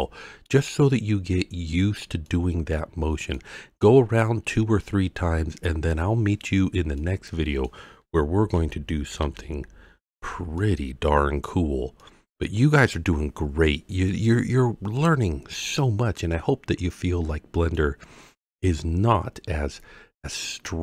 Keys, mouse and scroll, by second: 1.7-2.3 scroll down 2, 2.3-3.3 middle drag, 7.0-7.7 middle drag, 8.5 alt+g, 9.2 alt+r, 10.1 alt+s, 10.6-11.2 middle drag, 11.4-12.0 scroll up 3, 12.0-12.9 middle drag, 15.6-17.7 middle drag, 18.2-18.7 scroll up 2, 18.7-20.8 middle drag.